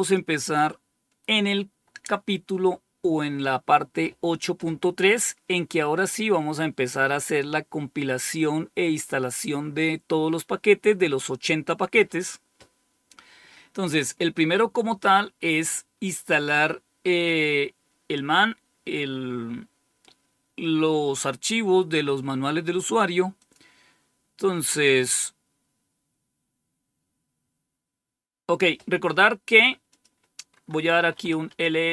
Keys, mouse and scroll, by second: 2.4-3.1 scroll up 2, 23.3 click, 29.8 click, 30.7-31.5 typing.